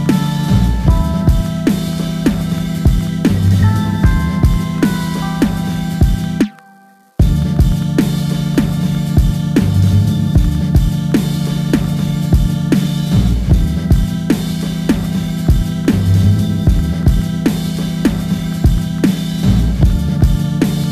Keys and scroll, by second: 0.0-0.3 typing, 9.2-10.0 typing.